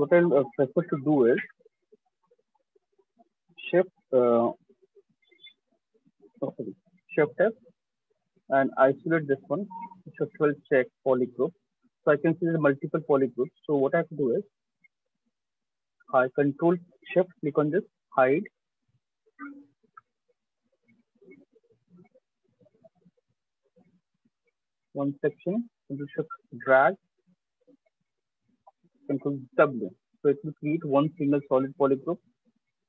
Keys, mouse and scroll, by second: 6.7 f, 8.4 click, 9.0 click, 9.5 f, 10.1 click, 10.6 click, 11.3 click, 13.6 click, 13.8 click, 15.4 click, 17.5 click, 18.5 click, 19.5 click, 20.7 shift+click, 22.5 click, 24.5 shift+click, 25.9 click, 27.3 shift+click, 28.1 right click, 29.1 ctrl+w, 31.5 click, 32.2 click, 32.3 shift+click.